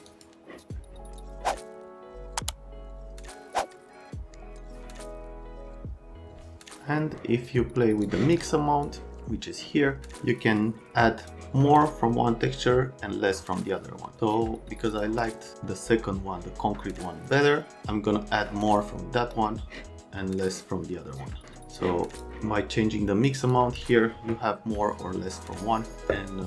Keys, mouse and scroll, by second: 0.1 click, 8.0 middle click, 10.0 middle click, 11.0 click, 14.9 click, 15.7 middle click, 22.1 click, 23.3 click, 23.4 click.